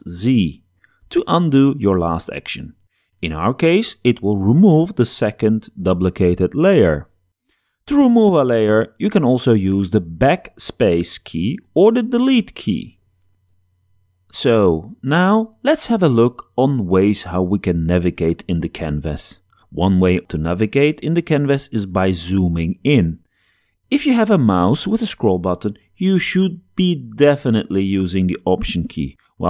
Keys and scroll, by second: 0.0 super+z, 10.8 BackSpace.